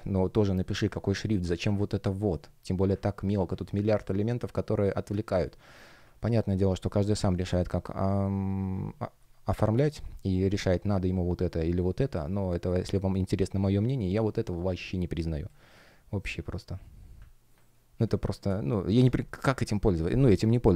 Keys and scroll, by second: 4.0 space, 6.2 F1, 6.7 shift+o, 7.6 shift+g, 9.1 space, 9.8 shift+o, 10.2 shift+g, 12.2 shift+o, 15.4 space, 17.6 space.